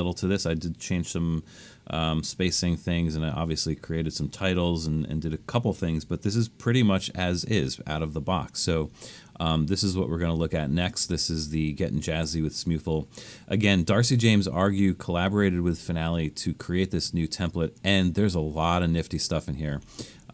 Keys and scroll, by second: 10.6 super+=, 11.1 super+=, 11.5 super+=, 12.1 super+=.